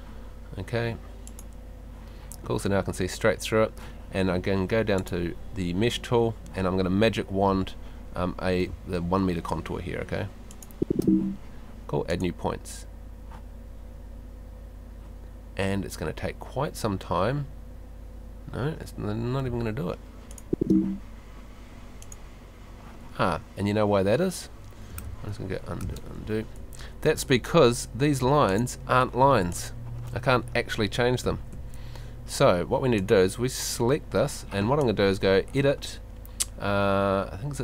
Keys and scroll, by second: 8.7 space, 19.5 space, 23.2 Escape, 31.2 Escape.